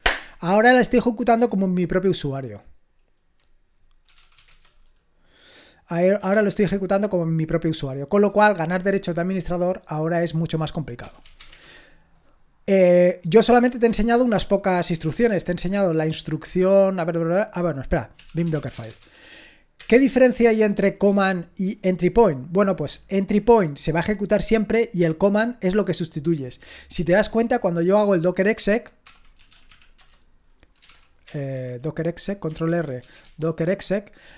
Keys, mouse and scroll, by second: 3.8-4.8 typing, 6.3 ctrl+l, 10.8-12.0 typing, 12.1-13.2 right drag, 13.9-17.3 scroll down 1, 17.3 scroll down 1, 17.6 click, 17.9-19.8 typing, 21.1-22.2 typing, 29.1-31.4 typing, 32.7 ctrl+r, 32.8-33.7 typing.